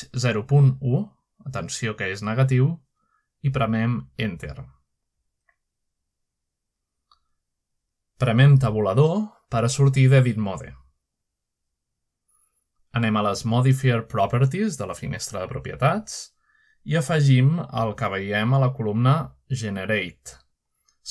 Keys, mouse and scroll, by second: 1.2-1.8 typing, 3.5 Return, 6.8-7.6 scroll down 2, 10.1 middle click, 10.8 Tab, 12.1 shift+middle click, 12.9-13.9 middle drag, 16.4 click, 18.5 click.